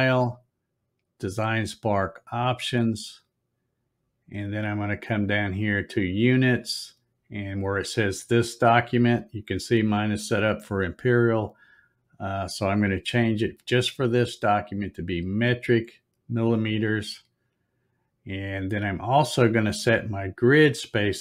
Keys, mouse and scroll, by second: 2.5 click, 5.5 click, 12.5 click, 14.7 click, 16.8 scroll up 3, 18.1 scroll up 1.